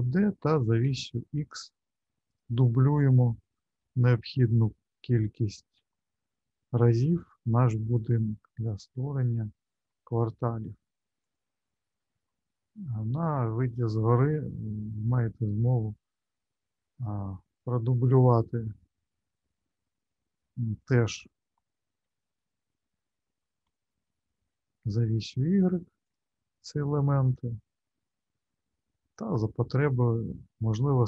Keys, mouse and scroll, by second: 3.8 shift+d, 8.8 shift+d, 12.7 shift+middle click, 13.5 alt+middle click, 22.0 shift+d.